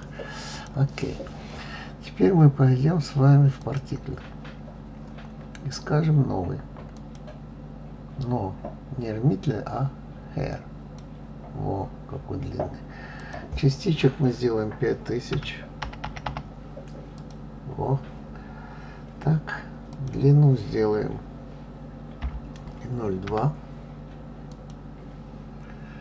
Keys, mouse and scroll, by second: 0.4 click, 3.6 click, 6.9-8.3 drag, 10.6-16.0 drag, 16.0 0, 19.9-22.9 drag.